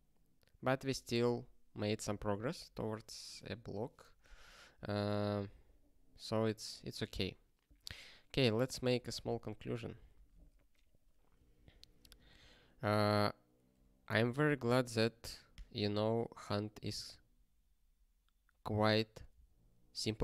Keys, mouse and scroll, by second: 1.2 ctrl+p, 6.2 scroll down 1, 8.7 ctrl+s, 9.1 scroll down 1, 10.1-11.0 scroll down 1, 11.0 click, 11.4 ctrl+p, 11.9 ctrl+a, 12.0 ctrl+space, 12.4 ctrl+e.